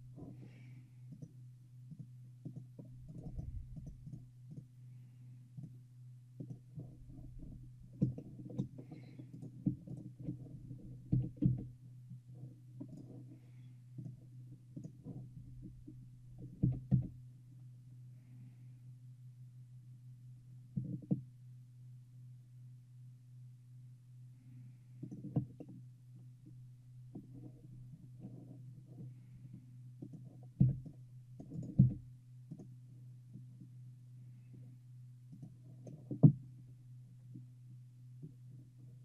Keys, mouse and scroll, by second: 3.2-4.9 right drag, 8.3-9.4 shift+middle drag, 9.4-11.2 shift+drag, 9.4-11.9 shift+right drag, 10.5 shift+middle click, 11.2 shift+g, 14.1-16.6 drag, 16.8 g, 25.7-29.9 middle drag, 30.1-31.9 drag, 30.7 c, 31.9 x, 35.5-37.2 drag, 37.7-39.0 middle drag.